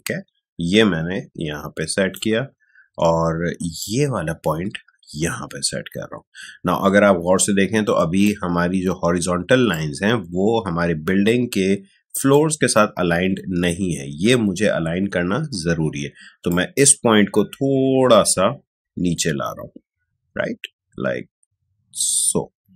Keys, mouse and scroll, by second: 16.4-22.7 drag.